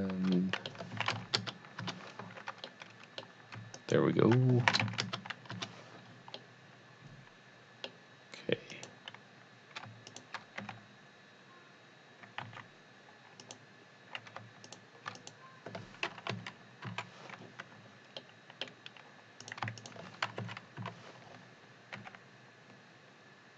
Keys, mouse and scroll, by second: 0.3 double middle click, 1.0 s, 1.2 z, 1.4 KP_0, 1.9 KP_Enter, 2.7 middle click, 3.7 alt+click, 4.4 click, 4.6 s, 5.0 KP_0, 5.5 KP_Enter, 6.3 middle click, 6.7 middle click, 8.7 click, 10.1 shift+click, 10.5 click, 10.6 g, 12.4 x, 13.5 click, 14.7 shift+click, 16.3 KP_1, 17.0 KP_3, 18.2-19.4 middle drag, 19.4 click, 19.8 shift+click, 20.4 KP_1, 20.9 KP_3, 22.0 g.